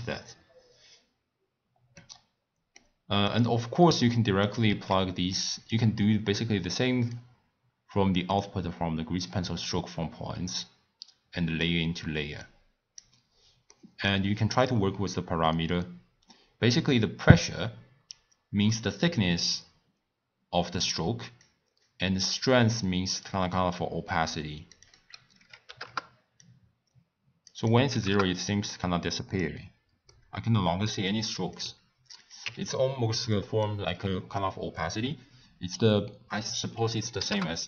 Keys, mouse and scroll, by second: 1.9-3.2 middle drag, 3.2 click, 3.7 click, 5.1 shift+d, 6.4 click, 8.3 click, 10.6 click, 12.4 click, 13.7 middle click, 14.6-17.6 drag, 21.8-28.7 drag, 28.7-29.6 middle drag, 29.6 scroll down 1, 29.6-30.1 scroll up 1, 30.1-31.5 middle drag, 31.5-32.7 drag, 33.3-35.7 middle drag, 35.7-37.6 drag.